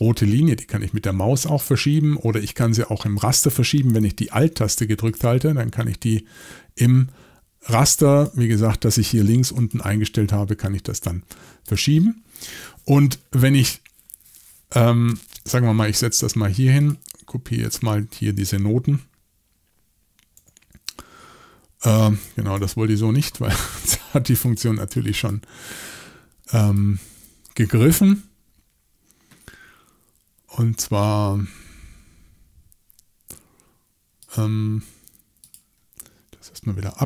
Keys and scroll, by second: 20.4 r, 22.5 super+z.